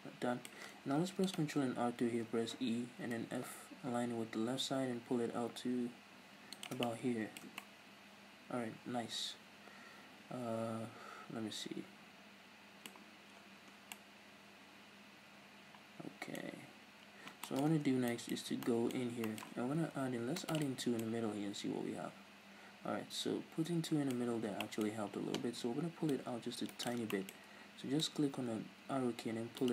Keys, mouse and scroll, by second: 1.0 ctrl+r, 6.6 shift+click, 6.8-20.6 middle drag, 7.4 Tab, 13.3 scroll down 1, 16.5-17.4 scroll up 2, 17.7 Tab, 18.3 scroll up 2, 19.7 ctrl+r, 20.6 click, 20.7 right click, 20.8 scroll down 2, 20.9 Tab, 21.0-26.1 middle drag, 24.4 Tab, 24.8-26.1 scroll up 2, 26.1 scroll up 1, 26.1 click, 26.8 shift+right click, 27.1 middle click, 28.0-29.7 drag.